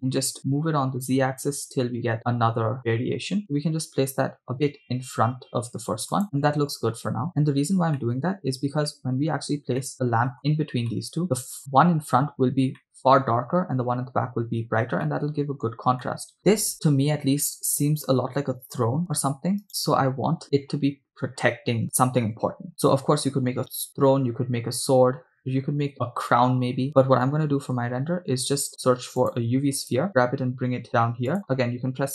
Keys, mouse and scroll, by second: 6.2 click, 8.0-9.4 middle drag, 9.9-10.4 shift+middle drag, 11.0 middle drag, 11.2 scroll down 2, 11.6 scroll up 3, 11.7-12.1 shift+middle drag, 12.2-12.7 scroll up 2, 12.9-13.5 shift+middle drag, 13.9-14.5 scroll down 2, 14.5-15.1 scroll down 1, 15.1-15.8 middle drag, 16.0-16.3 shift+middle drag, 19.7 right click, 27.6 shift+a, 30.1 g, 31.3-31.9 drag.